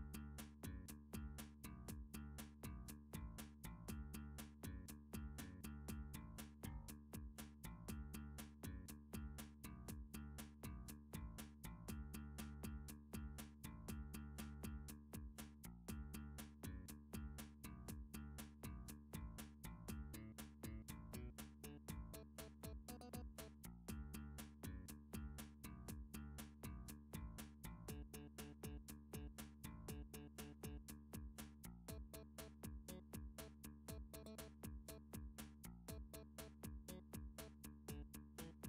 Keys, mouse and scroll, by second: 0.3 shift+middle click, 0.6 scroll down 2, 0.8 shift+middle click, 3.8 middle click, 4.4 click, 5.1 shift+click, 9.4 g, 9.7 z, 11.4 click, 11.8 g, 12.7 middle click, 13.0 middle click, 13.1 middle click, 13.7 middle click, 14.1 click, 14.5 shift+click, 15.4 g, 15.6 z, 17.5 click, 17.7 click, 17.8 g, 18.3 g, 18.9 g, 19.6 click, 20.6 middle click, 21.3 g, 23.2 click, 23.7 middle click, 23.9-24.4 scroll, 24.4 3, 24.8 scroll up 4, 25.1 scroll, 25.5 shift+middle click, 27.4 scroll, 27.8 shift+middle click, 28.3 Tab, 28.7 click, 29.5 a, 31.1 click, 31.8 7, 33.8 g, 34.6 click, 35.5 3, 37.6 g, 38.3 click, 38.6 middle click.